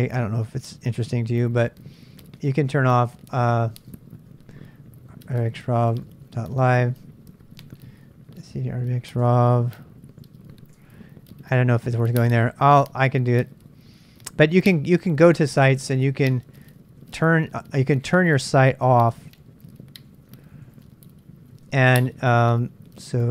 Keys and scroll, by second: 0.0 Tab, 2.3-10.7 typing, 10.8 Tab, 11.8-12.5 BackSpace, 16.8-17.6 typing, 19.1-23.3 typing.